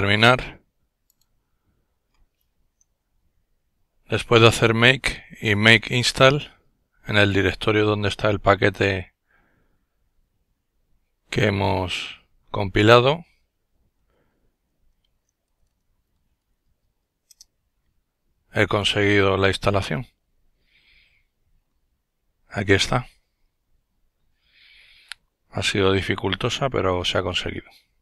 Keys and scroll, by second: 14.0-16.9 typing, 17.3 Return.